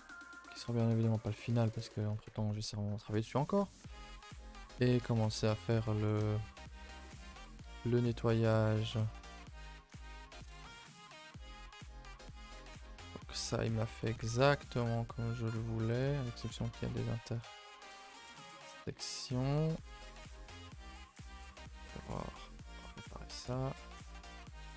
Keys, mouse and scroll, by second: 1.5 click, 1.9 a, 2.0 a, 2.6-3.2 middle drag, 3.2 scroll up 2, 3.5 a, 3.6 a, 4.3-5.1 shift+middle drag, 5.1 click, 5.3 shift+middle click, 5.4-5.7 scroll up 4, 5.7 Tab, 5.9 Tab, 6.4-7.2 scroll up 1, 9.6 click, 10.0 shift+middle click, 10.1-10.4 scroll up 4, 10.4 Tab, 10.9 shift+middle click, 11.9 click, 12.2 middle click, 12.5 a, 12.7 a, 12.8 scroll down 1, 13.0 shift+middle click, 13.6 scroll down 1, 13.8 a, 13.9 a, 14.0-15.5 middle drag, 15.5-15.8 scroll up 1, 15.8-17.3 shift+middle drag, 17.3 click, 17.9 middle click, 18.5 scroll up 1, 18.8 middle click, 19.0 scroll up 1, 19.8 click, 20.3 shift+middle click, 20.5 a, 20.6 a, 21.1 click, 21.5 click, 21.9 g, 23.2 click, 23.3 g.